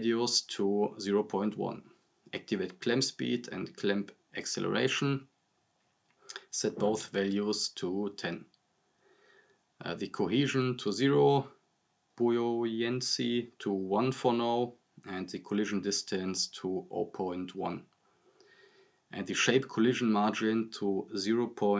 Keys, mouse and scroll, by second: 1.9 click, 3.4 Return, 4.7 click, 5.6 Return, 7.6-8.1 drag, 10.0-10.7 drag, 13.7 click, 19.3 Return, 21.4-21.7 drag.